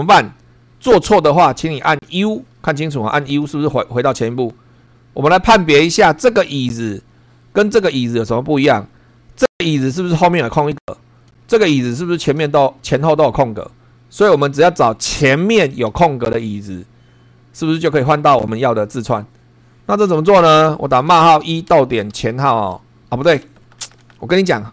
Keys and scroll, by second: 0.1 super+3, 3.4 u, 5.9 Right, 6.6 Left, 7.3 Right, 8.6 Left, 9.8 Right, 11.3 Right, 11.8 Left, 12.4 Right, 14.3 Left, 15.6 Right, 20.9-23.4 typing.